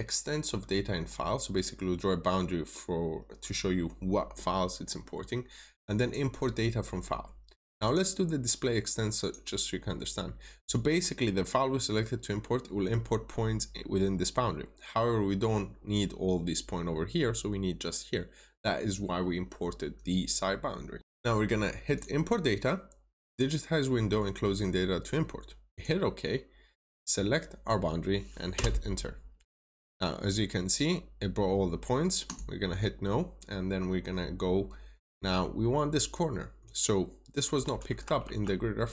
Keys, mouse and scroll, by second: 28.4 Return, 32.2 click, 35.3 middle click, 38.1 alt+Tab.